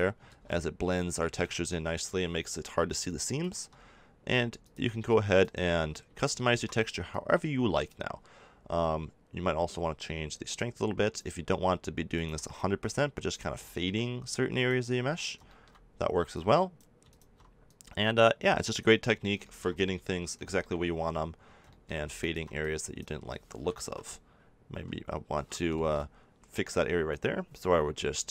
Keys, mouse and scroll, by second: 0.2 ctrl+z, 6.1 middle click, 7.1-8.8 drag, 8.8-10.5 middle drag, 10.5-19.0 drag, 19.0-22.1 middle drag, 22.1-24.4 drag, 23.8 ctrl+z, 24.7 g.